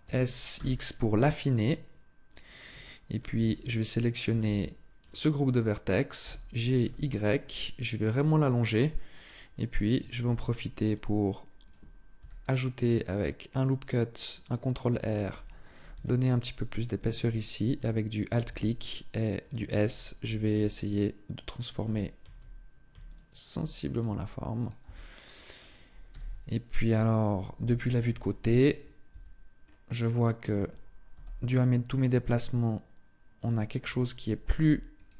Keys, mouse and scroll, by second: 2.1 click, 2.6 shift+middle click, 3.2 a, 4.0 b, 6.0 g, 8.2 click, 10.1 ctrl+r, 11.4 click, 12.0 s, 14.1 click, 15.2 alt+right click, 15.7 s, 16.5 click, 17.6 alt+right click, 18.2 s, 21.0 alt+right click, 22.8 alt+right click, 23.8 s, 24.4 click, 24.6 Tab, 25.8 z, 27.2 z, 27.8 KP_3, 28.8 Tab, 29.4-29.8 scroll up 2, 30.8 scroll up 1, 30.9 g, 33.3 click, 33.6 a, 34.3 b.